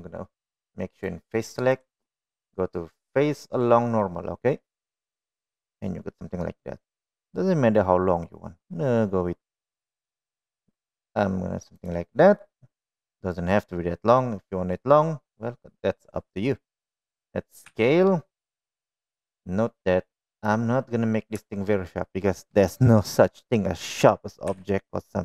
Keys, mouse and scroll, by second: 1.2 click, 1.9-12.2 right drag, 12.7-13.8 middle drag, 15.0 middle click, 18.0 s, 21.8 shift+middle click, 24.8 s.